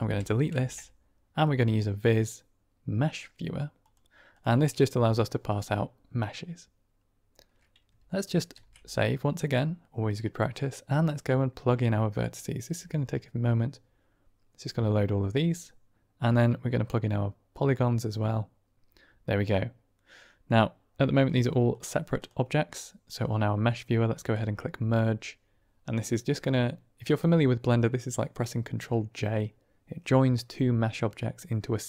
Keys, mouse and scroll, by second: 0.0-0.4 typing, 8.5 ctrl+s, 10.4-13.9 drag, 16.3-18.7 drag, 19.4-20.4 middle drag, 22.1 drag, 24.2-31.8 drag.